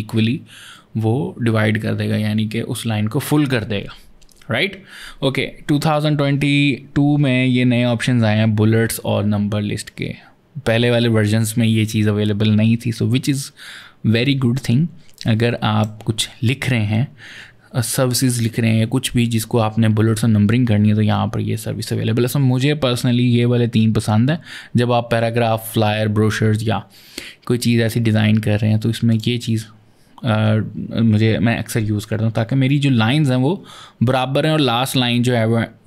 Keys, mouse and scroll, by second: 15.0 click, 28.9 click.